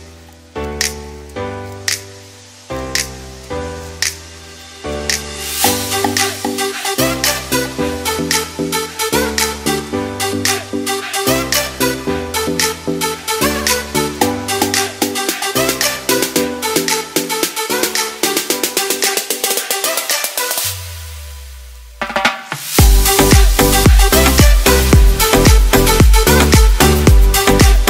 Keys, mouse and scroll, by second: 0.9 KP_1, 2.3 s, 4.5 alt+a, 4.8 middle click, 8.5 click, 9.0 middle click, 15.3 click, 16.0 click, 16.4 middle click, 19.8 shift+middle click, 20.3 middle click, 23.7 scroll down 1, 23.9 shift+middle click, 24.3 middle click.